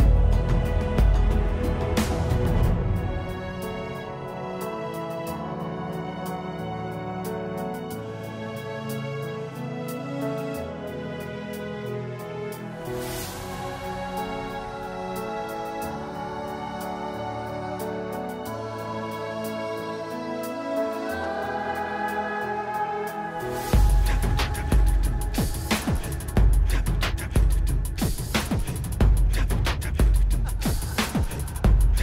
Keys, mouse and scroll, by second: 5.1 click, 7.8 click, 11.2 click, 19.5 click, 20.5 click, 27.6 click, 28.7 middle click, 31.7-32.0 scroll up 1.